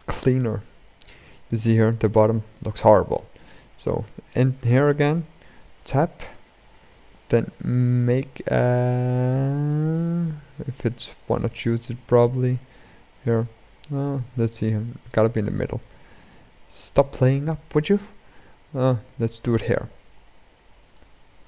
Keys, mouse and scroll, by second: 3.6 Tab, 4.1 shift+middle click, 4.7-5.8 scroll up 1, 5.8-6.7 scroll down 1, 6.7 scroll down 1, 6.8 ctrl+r, 15.1-16.3 middle drag, 16.3 scroll up 1, 16.7-17.7 shift+middle drag, 17.7 ctrl+r.